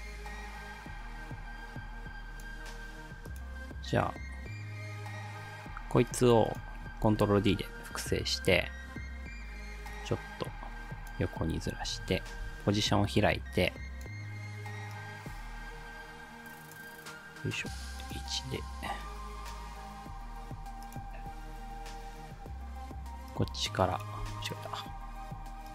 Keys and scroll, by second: 7.1 ctrl+d, 12.4 p, 24.3 ctrl+z.